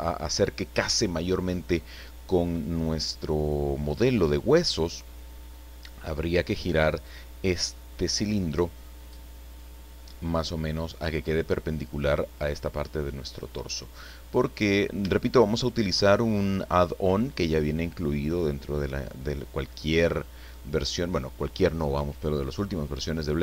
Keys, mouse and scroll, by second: 10.4 click, 11.9 click, 13.3-13.6 scroll up 1, 13.8 scroll down 1, 14.4 scroll down 1, 15.1 shift+middle click, 16.0 shift+middle click.